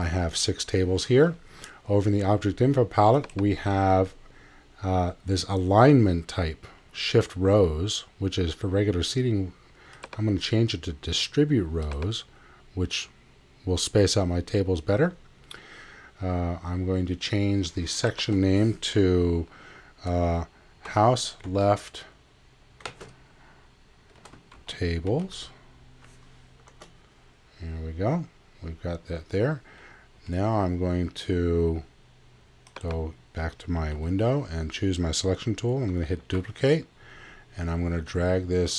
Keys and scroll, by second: 21.5 shift+l, 24.3-25.7 typing, 26.7 Tab, 30.1 x, 33.9 x, 36.2 super+d.